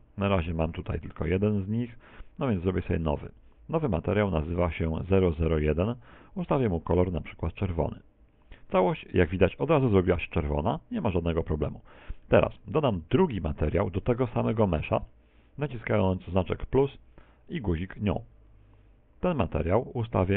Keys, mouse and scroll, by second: 7.3-7.8 scroll down 2, 7.5 shift+middle click, 7.8 middle click, 8.1 middle click, 8.3 shift+middle click, 8.9 click, 12.7 click, 16.8 click.